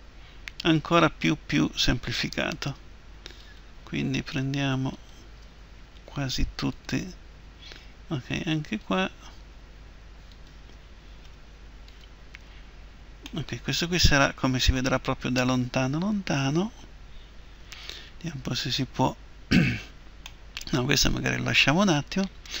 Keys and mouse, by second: 3.4-13.4 right drag, 6.0 Delete, 11.3 Delete, 17.9-20.2 right drag, 20.5-22.6 middle drag.